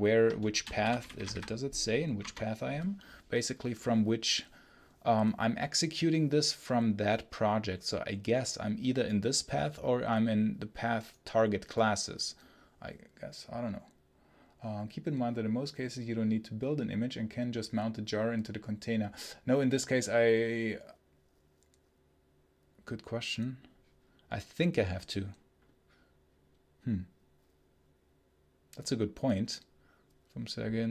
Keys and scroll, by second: 0.4 shift+', 0.7 h, 1.1 ctrl+b, 2.0 Return.